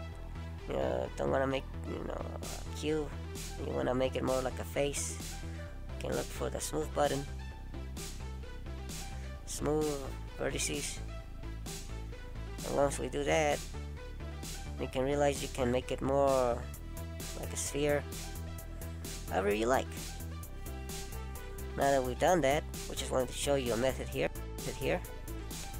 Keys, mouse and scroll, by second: 2.7 right click, 9.6 right click, 12.9 middle click, 16.5 right click, 18.2 middle click, 25.6 ctrl+z.